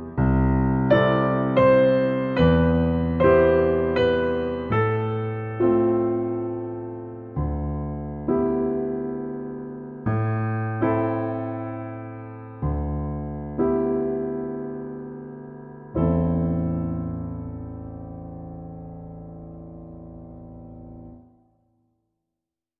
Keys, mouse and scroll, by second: 0.2-3.5 drag, 4.3 click, 4.7-5.2 scroll down 4, 10.2-11.2 middle drag, 11.2-12.0 scroll up 1, 12.0 middle click.